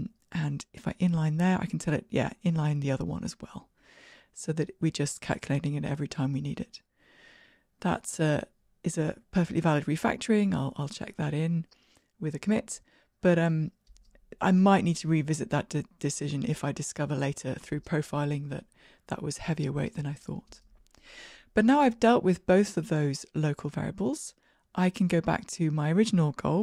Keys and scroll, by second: 0.3 alt+super+n, 6.4 ctrl+r, 6.4 shift+F10, 8.7 super+k, 11.8 shift+Escape.